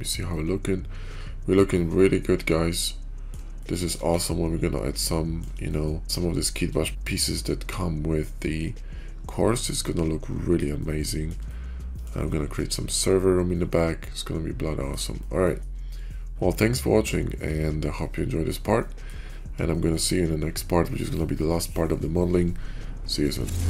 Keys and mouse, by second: 0.2-3.3 middle drag, 3.5 shift+middle click, 4.0-5.3 ctrl+middle drag, 5.6-6.5 shift+middle drag, 6.8-10.5 middle drag, 10.7-11.2 shift+middle drag, 11.4-12.0 middle drag, 12.1-12.6 shift+middle drag, 12.9-14.8 middle drag, 15.0-15.5 shift+middle drag, 15.9-18.4 middle drag, 18.7-19.0 shift+middle drag, 19.6 shift+middle click, 22.9 middle click.